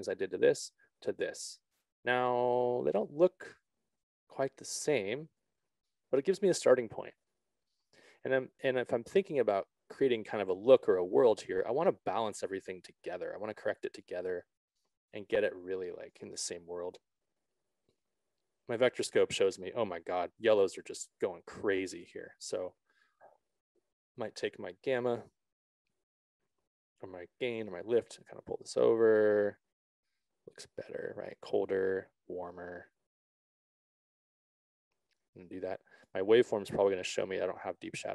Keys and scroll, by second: 28.0 ctrl+z.